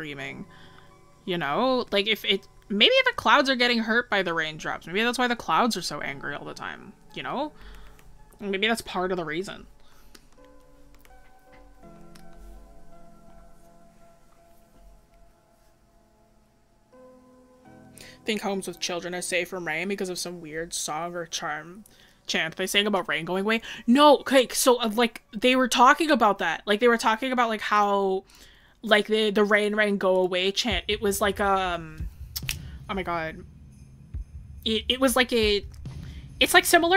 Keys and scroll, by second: 10.0 scroll.